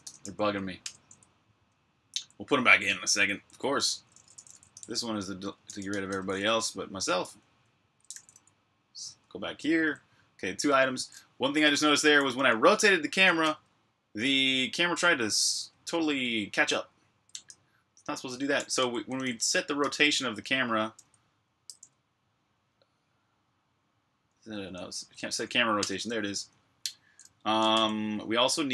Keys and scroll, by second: 0.0-3.2 typing, 5.4-7.3 typing, 9.1-9.8 typing, 18.1-20.5 typing, 21.5 Tab, 24.9 Tab, 25.1 Tab, 25.2 Tab, 25.7 Return, 27.6 shift+j.